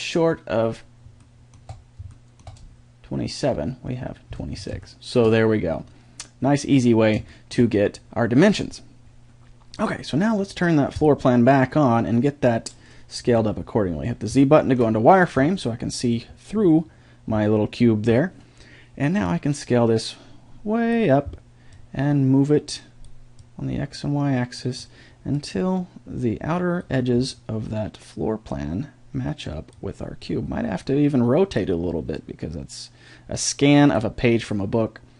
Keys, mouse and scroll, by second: 11.0-12.7 drag, 13.3 z, 19.2-20.9 drag, 22.5-28.6 drag, 30.8-33.9 drag, 34.5-35.1 drag.